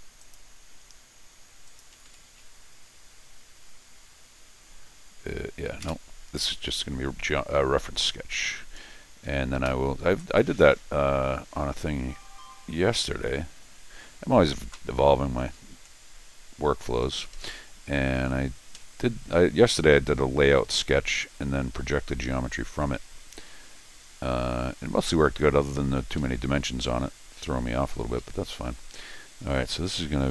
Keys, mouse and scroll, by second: 0.2 click, 1.7 click, 1.9 Escape, 2.1 Escape, 5.8 ctrl+z, 6.4 Escape, 6.7 scroll down 2, 7.6 scroll up 2, 8.0 scroll down 2, 8.7 scroll up 2, 9.2 Escape, 9.6 Escape, 13.6 scroll down 2, 14.2 scroll up 2, 15.4-15.7 scroll up 1, 15.9 scroll down 1, 17.0 Escape, 17.2 Escape, 17.3 Escape, 18.3 middle click, 18.7 Escape, 19.6 scroll down 2, 19.9 scroll up 2, 21.1 scroll down 2, 21.3 scroll up 2, 22.5 scroll up 2, 24.5 middle click, 24.5-25.3 scroll up 5, 25.7 scroll down 2, 26.2 Escape, 28.2 Escape, 28.7 d, 29.9 click.